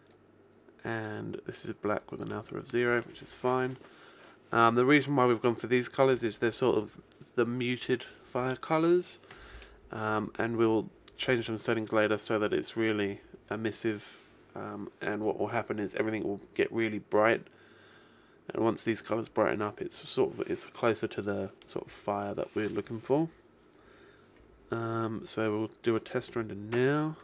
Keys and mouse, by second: 0.1-2.9 drag.